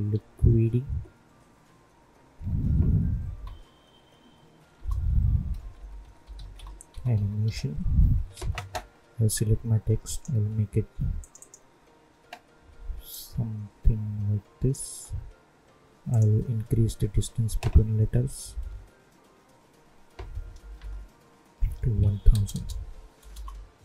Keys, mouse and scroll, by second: 0.0 shift+u, 2.1-3.2 typing, 4.7 Return, 5.2-7.9 typing, 8.3 ctrl+a, 10.0-16.0 drag, 23.3 Return.